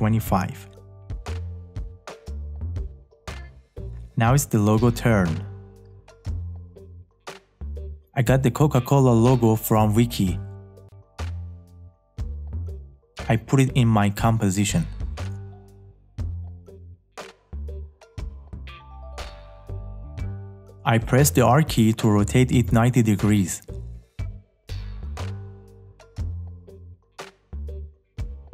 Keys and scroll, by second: 20.9 r.